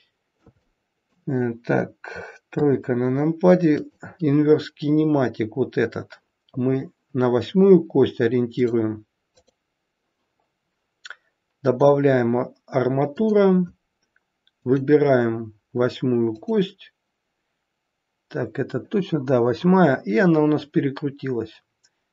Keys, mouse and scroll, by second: 0.6 middle click, 2.4 KP_3, 3.0-3.6 scroll up 2, 3.8 click, 8.5 click, 9.3 click, 14.5 click.